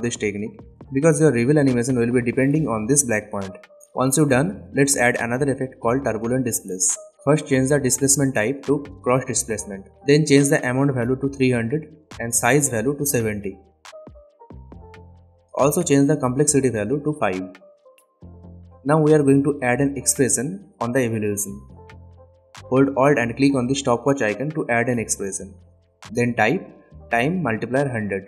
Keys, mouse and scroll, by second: 2.1 click, 4.0-5.3 typing, 6.4 click, 11.5 Return, 12.6 click, 14.1 Return, 16.4 click, 17.4 Return, 21.4 click, 25.9-27.1 typing.